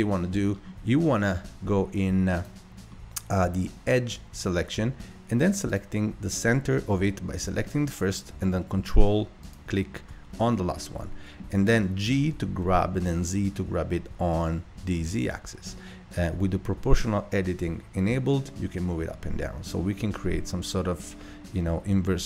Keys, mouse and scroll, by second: 0.5 scroll down 3, 2.4 click, 2.9 middle click, 3.4 scroll up 2, 5.7 click, 9.4 ctrl+click, 10.5-12.1 middle drag, 12.1 g.